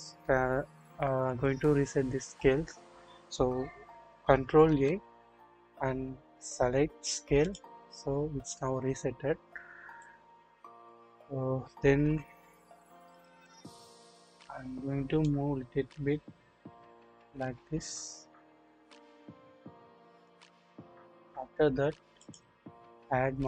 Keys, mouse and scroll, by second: 4.6 ctrl+a, 10.0 click, 11.6-11.9 scroll down 1, 12.0 KP_7, 13.2 click, 13.6-13.9 scroll up 1, 15.2-20.3 drag.